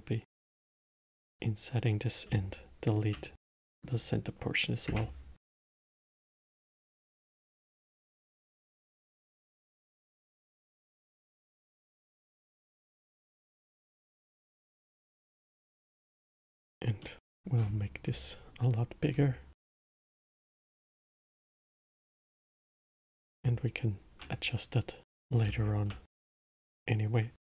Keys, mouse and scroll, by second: 0.0-1.6 right drag, 2.6 x, 4.0-5.2 middle drag, 5.2 2, 6.5 alt+click, 7.2 alt+click, 8.5 s, 9.9 alt+click, 10.6 scroll down 3, 11.2-12.2 middle drag, 12.2-12.9 scroll down 2, 12.9 middle click, 13.8 s, 17.4 middle click, 17.9-18.4 scroll up 10, 19.9 alt+click, 21.0 s, 21.9 scroll down 3, 22.5 middle click, 22.7-23.6 scroll down 3, 23.6 Tab, 25.8 Tab, 26.5-27.5 middle drag.